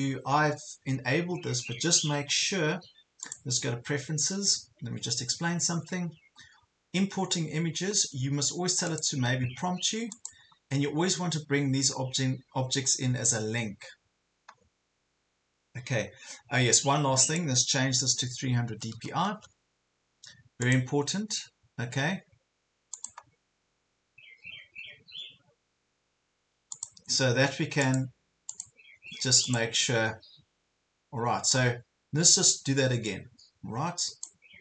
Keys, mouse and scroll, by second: 18.3 KP_3, 18.7 KP_0, 20.7-34.6 drag.